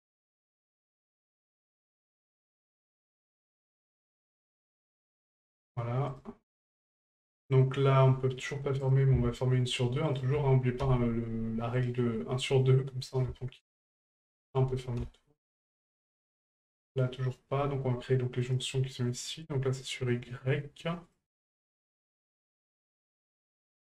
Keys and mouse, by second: 0.6 ctrl+click, 3.3-4.8 drag, 6.1 right click, 8.8 right click, 10.0 shift+right click, 11.8 right click, 13.6 shift+right click, 14.3 shift+right click, 16.1 right click, 18.4 right click, 21.0-22.3 drag.